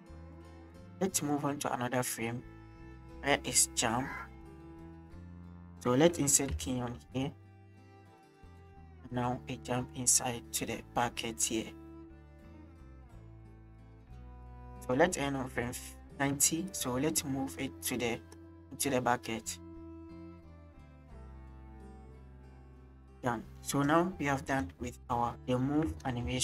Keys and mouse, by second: 0.4 shift+middle click, 1.3-5.0 drag, 6.5 i, 8.5-14.9 drag, 16.0 shift+drag, 16.0 shift+middle click, 16.7-17.0 drag, 18.5 middle drag, 19.7 click, 22.3-22.7 middle drag, 24.5 middle click, 26.3 space.